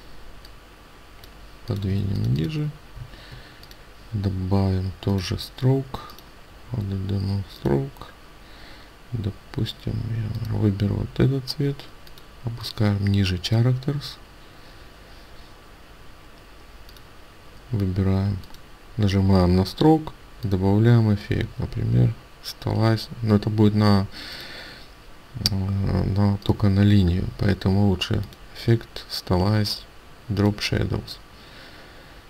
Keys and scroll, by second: 1.3 ctrl+space.